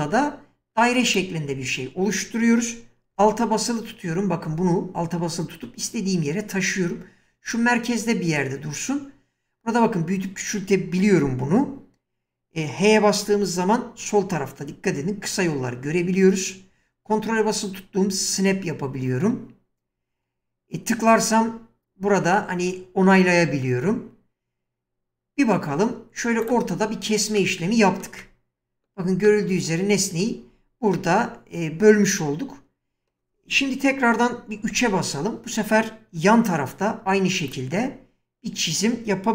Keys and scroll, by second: 13.3 h, 34.7 3.